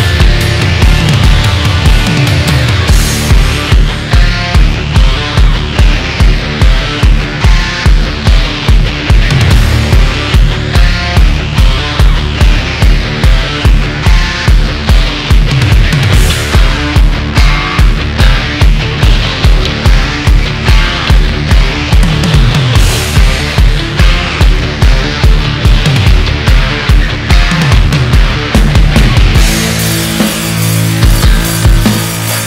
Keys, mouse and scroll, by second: 1.5-2.3 shift+middle drag, 2.3 Tab, 2.8 alt+z, 3.2 scroll up 1, 3.5-4.3 scroll down 1, 4.7 scroll up 1, 4.8-5.5 scroll down 5, 5.7-8.1 shift+middle drag, 8.1 scroll up 1, 8.3 KP_1, 8.9-9.9 shift+middle drag, 9.9 Tab, 10.2 middle click, 10.6-11.0 scroll up 2, 11.0 alt+z, 11.5 click, 12.4 KP_1, 13.3 click, 15.2 middle click, 16.0 KP_3, 17.0 click, 19.2 Tab, 19.6-20.1 middle drag, 20.1 alt+z, 20.5 scroll down 1, 20.8-22.5 middle drag, 22.5 KP_1, 22.9-23.3 scroll up 1, 23.3 Tab, 24.1 alt+z, 24.9 click, 26.5-29.4 middle drag, 29.4 ctrl+click, 30.0 middle click, 30.7 KP_1, 31.8 click.